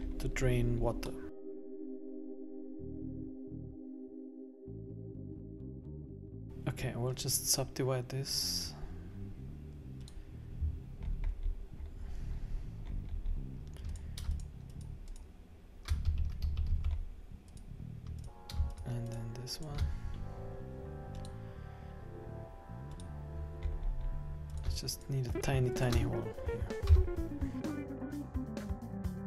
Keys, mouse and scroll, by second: 0.0-1.1 scroll up 11, 1.1 middle click, 1.5 k, 2.8 middle click, 2.9 scroll down 3, 3.0 ctrl+z, 3.0 scroll up 1, 3.2 middle click, 3.2 scroll down 14, 4.2 click, 4.2 right click, 4.3 shift+right click, 4.4 shift+right click, 4.5 s, 5.3 scroll down 16, 5.5 middle click, 5.6 scroll up 10, 5.7 scroll down 1, 5.7 middle click, 5.7 scroll down 1, 6.0 middle click, 6.2 scroll up 10, 6.4 click, 10.1 click, 11.1-11.6 scroll up 8, 11.9 scroll down 4, 12.5-13.0 scroll down 11, 13.0-13.9 scroll up 2, 13.9 right click, 14.3 shift+right click, 16.0 Escape, 16.6 Escape, 16.6 scroll down 3, 16.7 Escape, 17.1-17.5 scroll up 1, 17.5 right click, 18.3 right click, 18.7 shift+right click, 19.2 shift+right click, 19.5 right click, 21.1 click, 23.7-24.5 scroll up 7, 24.6 right click, 25.0 shift+right click, 25.6 right click, 26.9 x, 27.8 Tab, 27.8 scroll down 16, 27.9 Tab, 28.0 middle click, 28.0 scroll up 10, 28.1 middle click, 28.3 scroll down 1, 28.4 shift+right click, 28.5 right click, 28.6 Escape, 28.6 middle click, 28.6 Escape, 28.7 middle click, 28.9 right click, 28.9-29.2 shift+right click, 29.0 shift+right click, 29.1 shift+right click.